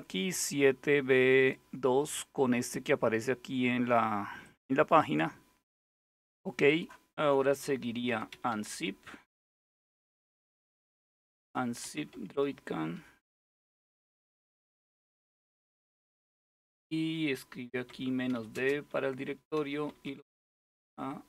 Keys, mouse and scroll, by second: 4.1 click, 5.6 click, 6.3 click, 7.5-13.8 typing, 17.5-21.2 typing.